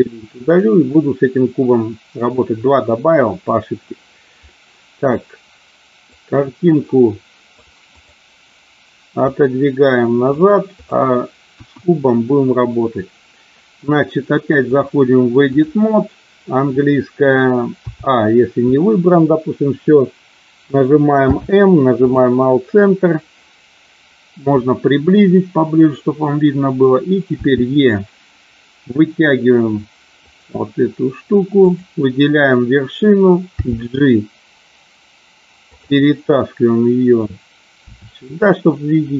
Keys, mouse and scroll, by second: 0.4 click, 4.4 middle click, 6.0-7.6 drag, 7.8 click, 9.2-10.3 drag, 11.4 KP_1, 14.7-15.7 drag, 17.7 a, 21.3 m, 27.4 e, 30.2 click, 31.6 click, 33.6 g, 35.7 click, 37.9 e.